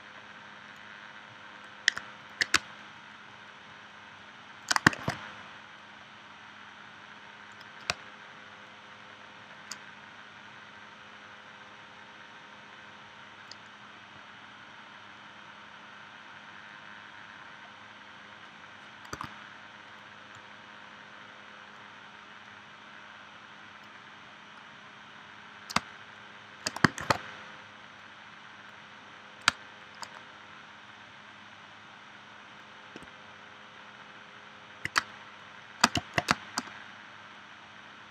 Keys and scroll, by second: 2.5 space, 5.0 shift+c, 7.9 space, 19.2 a, 25.8 space, 27.0 shift+c, 29.5 space, 35.0 space, 36.3 space.